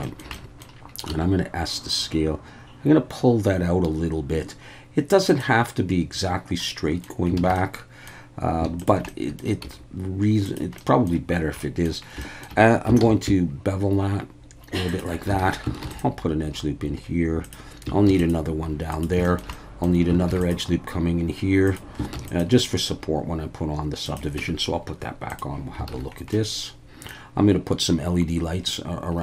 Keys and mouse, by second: 0.0 shift+middle click, 0.3 middle click, 1.1 s, 5.3 click, 6.7 middle click, 7.4 alt+a, 7.6 middle click, 8.8 alt+shift+click, 9.1 middle click, 9.6 s, 10.4 click, 10.8 middle click, 11.6 middle click, 12.3 shift+middle click, 13.0 ctrl+b, 14.9 shift+click, 15.4 alt+a, 15.8 ctrl+r, 17.4 click, 18.1 ctrl+r, 18.9 click, 19.3 shift+middle click, 19.6 middle click, 20.3 ctrl+r, 21.7 click, 22.1 ctrl+r, 24.0 click, 24.4 Tab, 25.3 click, 25.9 alt+a, 26.3-27.1 middle drag.